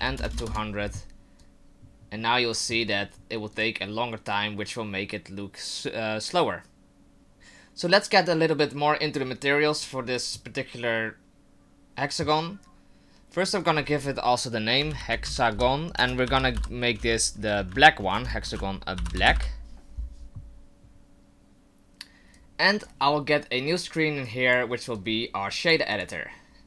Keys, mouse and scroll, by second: 0.3 KP_0, 1.4 click, 6.5 click, 7.3 right click, 7.3 shift+scroll down 1, 13.5 click, 13.9 click, 22.3 click, 24.2 click, 24.9 click, 25.9 click.